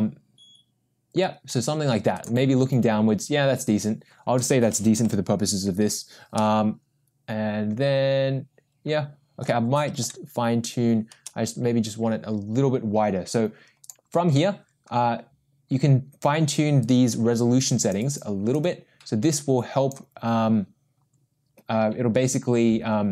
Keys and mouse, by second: 5.0 KP_0, 6.4-9.4 middle drag, 10.0 KP_0, 13.8 click, 16.9-17.9 drag, 18.5-19.9 drag.